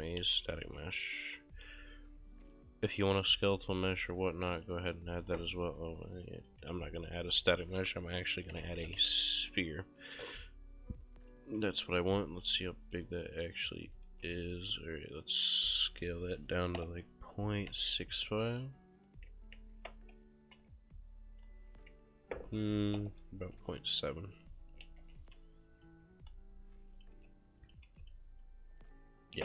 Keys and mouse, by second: 0.0-1.1 typing, 4.5 click, 6.0 click, 6.7 Delete, 7.3 click, 8.2-9.5 typing, 10.2 click, 11.3 right click, 11.5 s, 12.0 click, 12.7 right click, 14.0 right click, 14.2 s, 15.6 click, 17.7-20.8 typing, 23.0 ., 23.6 7, 24.9 ctrl+a, 25.2 ctrl+c, 25.7 click, 27.0 click, 27.2 ctrl+v, 27.6 click, 28.0 click, 28.0 v, 28.5 click.